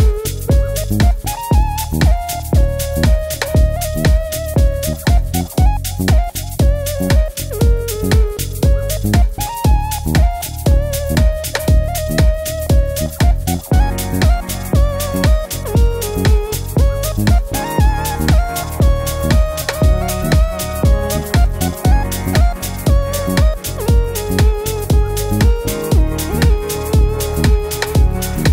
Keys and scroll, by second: 4.7 super+d, 17.6 d.